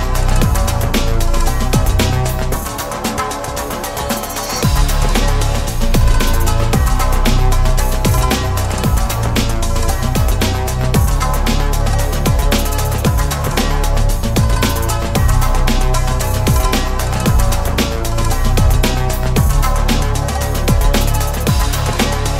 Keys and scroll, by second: 3.5 ctrl+z.